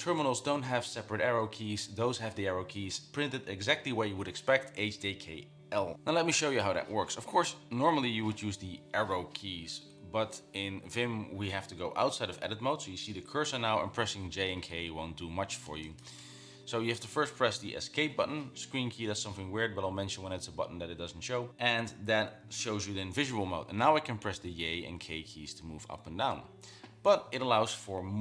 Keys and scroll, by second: 7.6 Down, 8.0 Up, 14.5-16.2 typing, 17.7 Escape, 24.2-27.0 typing.